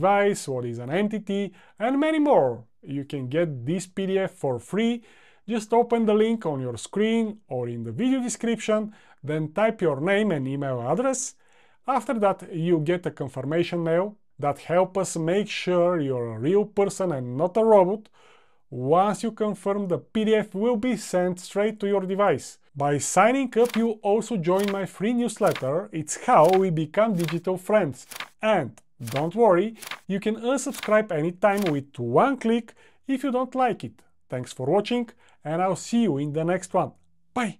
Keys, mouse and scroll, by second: 0.1-0.5 drag.